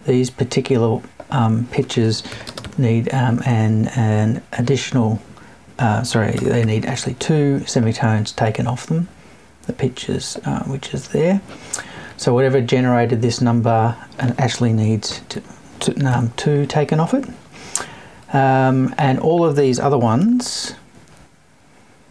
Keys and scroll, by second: 6.3 BackSpace, 15.0 Left, 16.3 Right.